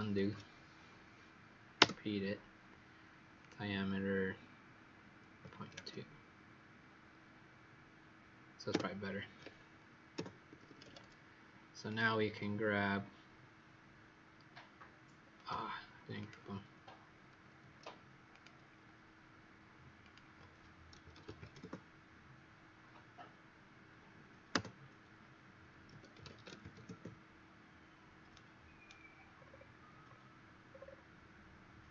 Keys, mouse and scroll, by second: 0.2 ctrl+z, 3.4 click, 5.3 KP_Decimal, 5.5 KP_2, 8.6 Return, 10.4 Escape, 10.6 Escape, 11.8 click, 16.7 ctrl+z, 17.2 ctrl+z, 18.3 click, 20.9-22.0 typing, 26.6 typing, 26.8 Return, 28.2 right click, 29.3-30.0 scroll down 3, 30.0-30.6 scroll down 2, 30.6 scroll down 1.